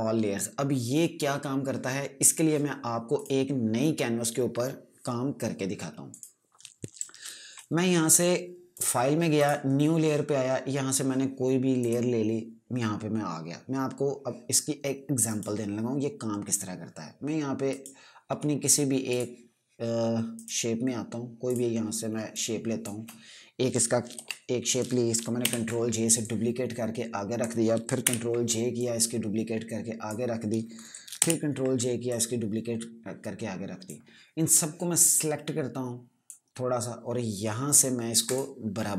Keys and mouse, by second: 3.7 click, 6.6 click, 9.3 click, 13.9 typing, 15.8 right click, 19.6 click, 20.9 right click, 22.0 click, 22.9 click, 24.7 v, 26.0 ctrl+j, 26.8 click, 28.6 ctrl+j, 29.3 click, 31.7 ctrl+j, 32.6 click.